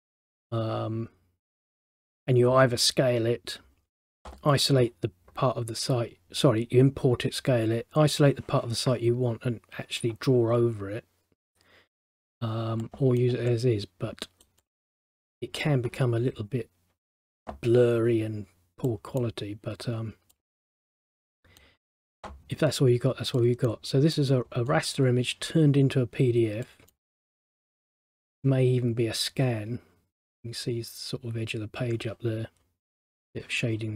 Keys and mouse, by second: 12.9 middle click, 13.6 middle click, 14.7 middle click, 19.0 middle click, 23.5 middle click, 26.8 middle click.